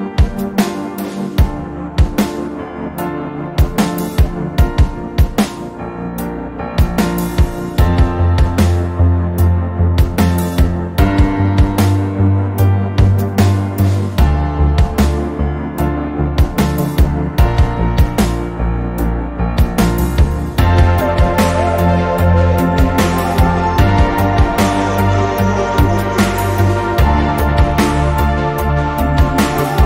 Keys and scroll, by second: 28.7 x.